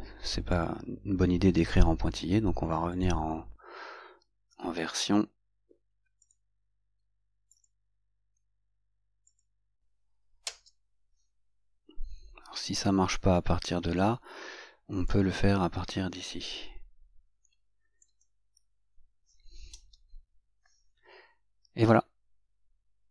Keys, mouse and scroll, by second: 0.8 click, 10.6 Return, 18.3 click.